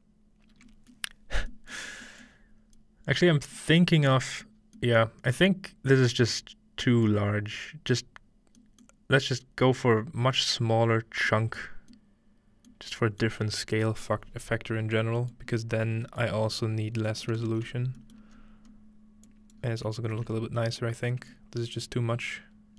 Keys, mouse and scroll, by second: 1.1-2.5 scroll down 1, 1.5 middle click, 2.5 scroll up 1, 4.6-6.2 scroll down 3, 5.1 middle click, 6.0-7.1 middle drag, 8.0 middle click, 8.0-9.9 scroll up 2, 8.9-11.2 middle drag, 13.6 middle click, 14.8-18.3 scroll down 3, 18.3-18.8 scroll up 2, 19.3-21.0 drag, 19.5 middle click, 19.5 scroll up 1, 19.6 scroll down 1, 19.7 middle click, 21.0-21.4 scroll down 2, 21.4-22.7 middle drag.